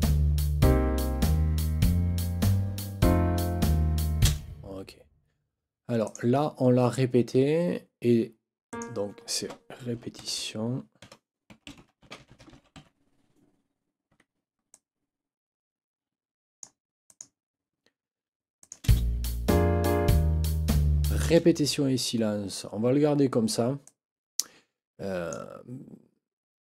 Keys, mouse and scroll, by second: 4.3 space, 6.0 click, 8.7 click, 10.1 ctrl+t, 11.0-13.2 typing, 14.1 Escape, 14.7-16.8 drag, 17.1 click, 18.6 click, 18.9 space, 21.3 space, 23.8-25.5 drag.